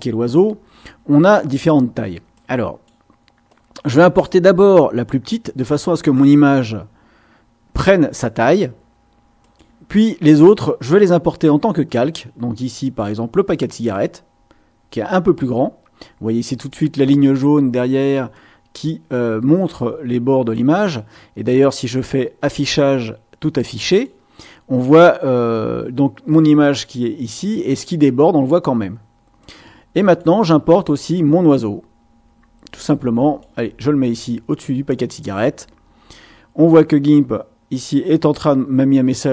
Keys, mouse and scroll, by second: 2.3 click, 3.5-6.3 drag, 9.4 click, 11.9-13.2 drag, 15.5-17.1 drag, 18.3-19.3 drag, 22.4 click, 23.9 click, 29.4-30.4 drag, 31.1-33.6 drag.